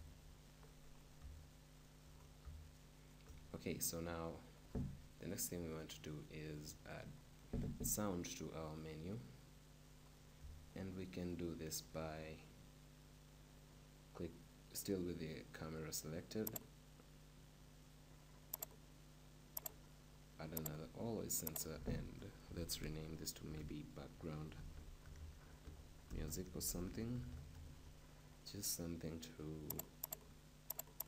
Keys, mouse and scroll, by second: 0.9 middle click, 4.1 shift+click, 4.6 shift+middle click, 10.0-12.5 middle drag, 29.8 click, 30.0 click, 30.8 click.